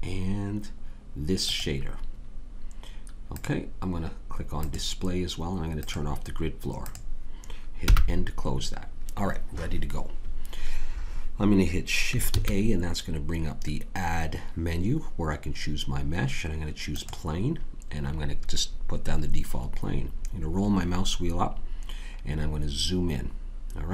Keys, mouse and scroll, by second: 7.8 n, 12.3 shift+a, 19.7 middle click, 20.8 middle click.